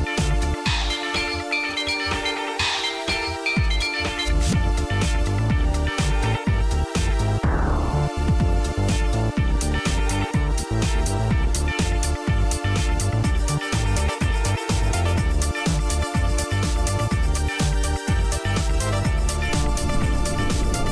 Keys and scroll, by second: 4.7-5.5 typing, 7.1-10.3 typing, 10.5 Return, 17.0 Down, 17.3 Down, 17.7-19.2 Down, 20.2 Up, 20.6 Up.